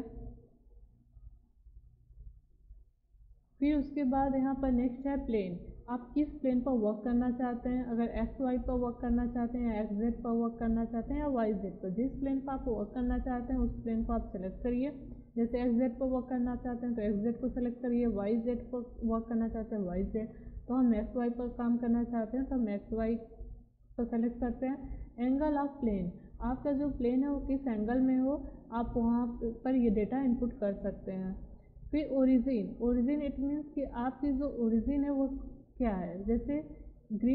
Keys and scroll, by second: 2.3 e, 2.8 a, 3.2 r.